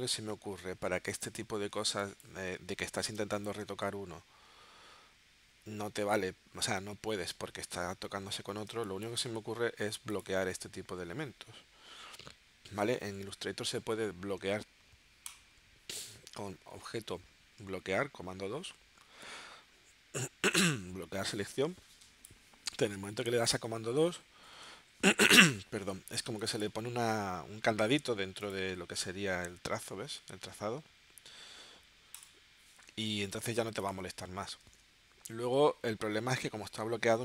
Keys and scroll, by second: 1.8 space, 3.1 space, 8.7 space, 9.4 v, 24.4 super+2, 34.6 shift+w.